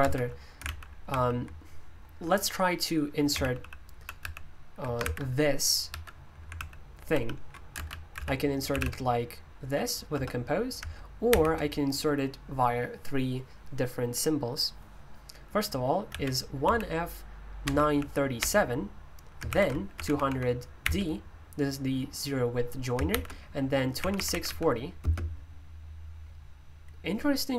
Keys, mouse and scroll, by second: 0.0 Escape, 0.6 super+l, 1.1 super+l, 3.6 super+l, 4.2 super+h, 5.0 v, 5.9 Escape, 6.5 super+l, 7.1 super+l, 8.1-8.7 typing, 11.0-11.8 typing, 16.1 typing, 17.4-20.8 typing, 19.5 ctrl+u, 22.9-25.5 typing.